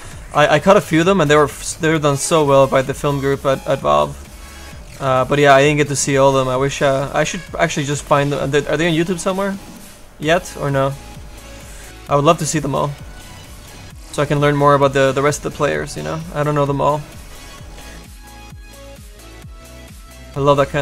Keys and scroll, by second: 2.4 s.